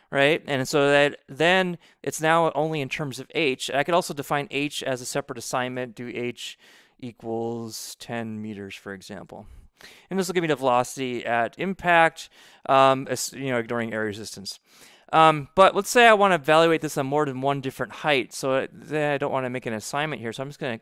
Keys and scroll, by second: 5.4 Return, 5.6-10.0 typing.